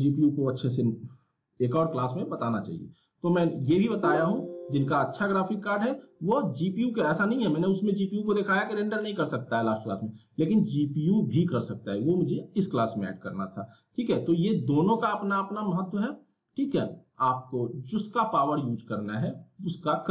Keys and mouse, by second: 4.7 click.